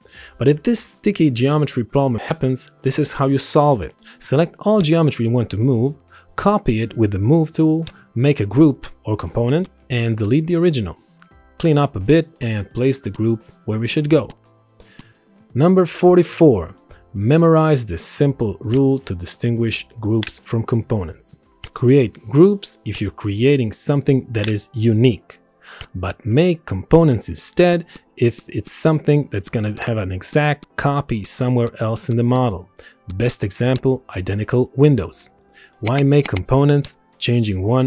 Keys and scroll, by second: 1.8 ctrl+z.